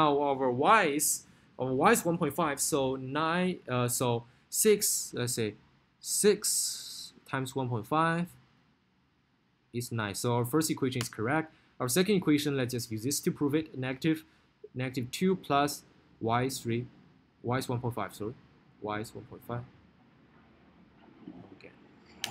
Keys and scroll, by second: 2.8 9, 8.0 6, 9.4 1, 10.2 ., 10.8 5, 11.2 Return, 15.0 2, 16.8 3, 18.8 Left, 20.1 1, 20.4 ., 21.5 5.